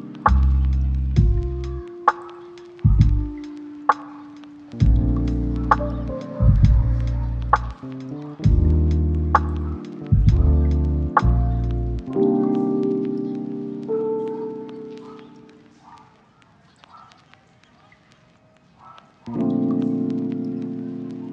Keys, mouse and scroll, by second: 4.4 scroll down 1, 4.5 scroll up 1, 4.7 click, 5.8 scroll down 1, 6.0 scroll up 1, 6.1 right click, 6.5 click, 6.7 right click, 6.9-7.3 scroll down 1, 7.3 scroll up 1, 7.3 right click, 8.1 scroll up 1, 8.4 click, 8.6 right click, 8.9-11.0 drag, 11.3-11.6 scroll down 1, 11.6 scroll up 1, 11.8 right click, 12.5-13.0 scroll up 1, 13.2 click, 13.7 right click, 14.4 scroll down 1, 14.5-15.1 scroll up 2, 14.7 right click, 15.1 right click, 15.6 click, 15.9 right click, 16.3 click, 17.7 right click, 17.8 scroll down 1, 17.9 scroll up 1, 18.1 click, 18.3 right click, 20.1 click, 20.4 scroll down 1, 20.5-21.0 scroll up 1, 21.0-21.3 drag.